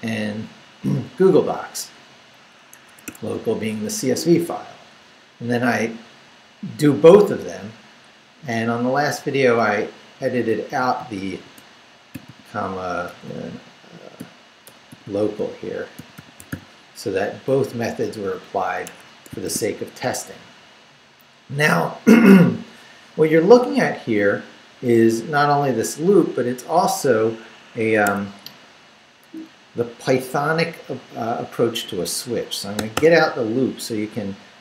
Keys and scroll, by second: 2.9 Escape, 4.9 Down, 5.6 Left, 7.0 Right, 9.2 Right, 10.7-13.1 typing, 14.2-17.0 typing, 15.4 Left, 17.2 Down, 17.5 Up, 18.8 Escape, 19.4 shift+v, 24.9 Down, 25.7 Up, 27.8 Escape, 32.8 d, 33.6 Left.